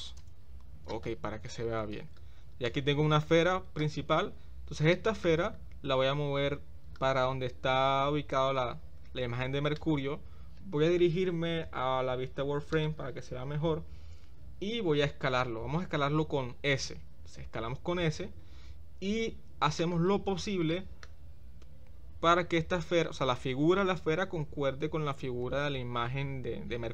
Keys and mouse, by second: 2.6 click, 4.9-5.2 shift+middle drag, 6.4 g, 17.2 s, 20.7 shift+middle click, 25.4 g.